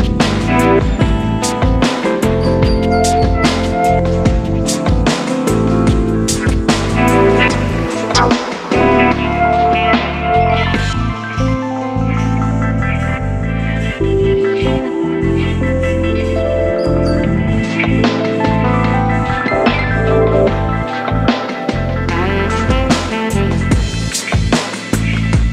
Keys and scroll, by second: 1.4 e, 3.9 v, 4.7 e, 6.2 v, 7.3 e, 14.2 super+0, 14.6 Tab, 15.1 super+', 18.8 super+d, 20.7 super+-, 21.1 super+0, 21.3 super++, 21.4 super+space, 21.9 super+t, 24.5 Left, 24.6 Down, 24.9 Return, 25.3 s.